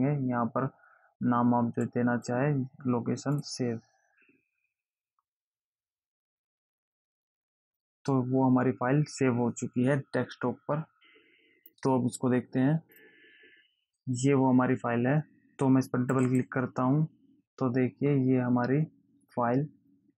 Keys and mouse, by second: 2.2 click, 3.7 click, 13.1 click, 16.5 click.